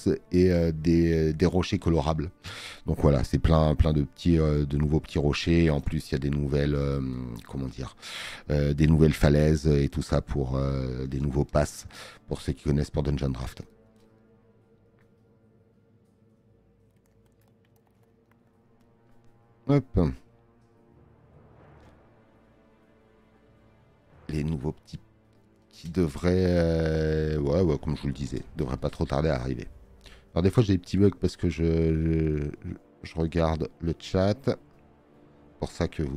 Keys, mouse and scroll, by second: 6.9 space, 7.8 click.